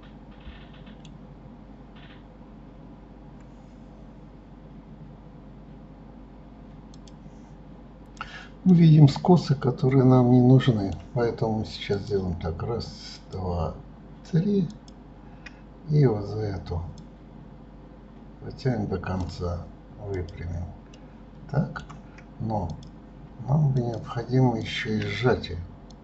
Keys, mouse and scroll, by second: 8.6-11.6 middle drag, 11.8 click, 13.0 shift+click, 14.6 shift+click, 16.8 click, 20.0 click, 20.8-22.6 middle drag, 22.6 click, 23.7 shift+click, 24.5 shift+click, 25.8 click.